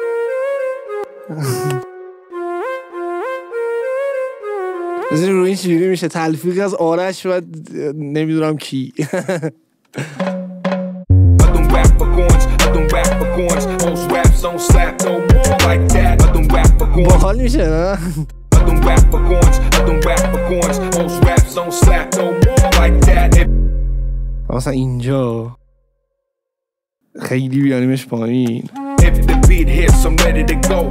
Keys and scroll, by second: 0.9 space, 1.9 Delete, 2.2 space, 5.1 space, 10.0 space, 17.1 space, 18.1 ctrl+e, 18.2 ctrl+d, 18.4 space, 23.3 space, 24.8 ctrl+d, 25.7 ctrl+s, 27.7 ctrl+a, 28.6 shift+Down, 28.9 space.